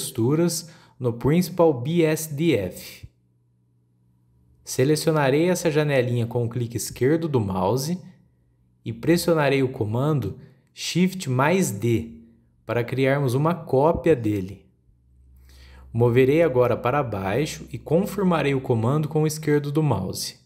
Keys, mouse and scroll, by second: 1.5-2.6 scroll down 6, 2.6-4.3 scroll up 3, 4.3 click, 5.1-5.4 scroll down 3, 5.4-7.1 middle drag, 7.1 click, 8.1 click, 12.4 shift+d.